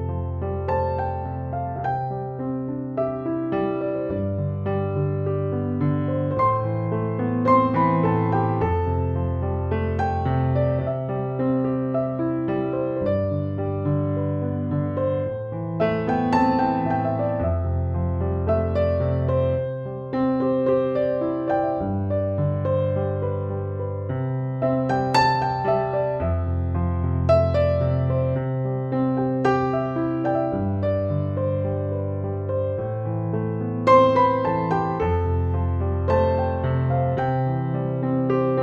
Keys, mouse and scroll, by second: 0.2-4.0 drag, 4.8 space, 4.9-5.5 click, 5.6 ctrl+=, 6.4-7.2 [, 7.6-8.8 drag, 9.2 ], 9.5 ], 9.7 ], 10.0 ], 10.2-11.4 click, 11.2 ], 11.5 ], 12.0-13.8 drag, 13.8 ], 14.1 ], 14.4-15.0 click, 15.4 [, 15.8 [, 16.0 click, 17.1 [, 17.6-18.5 click, 18.4 [, 18.5-19.2 drag, 23.9 space, 24.1-24.7 click, 24.4 space, 25.6 space, 26.9 ctrl+=, 27.4 [, 27.6 [, 27.8 [, 28.2-29.7 drag, 30.0 ctrl+z, 30.3-31.2 click, 31.3 space, 31.4 click, 31.8-32.1 space, 32.5-33.8 drag, 34.5 space, 34.7 click, 35.0-35.4 space, 37.0-38.0 drag.